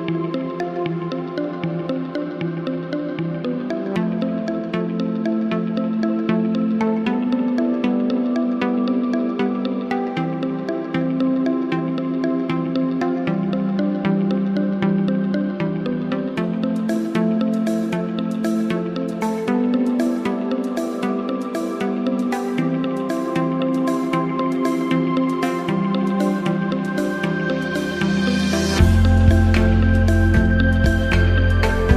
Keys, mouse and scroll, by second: 0.9-1.7 drag, 3.3 click, 4.7-5.5 drag, 8.7 click, 15.3 click, 18.2 click, 20.9 click, 27.5 click, 30.9 right click.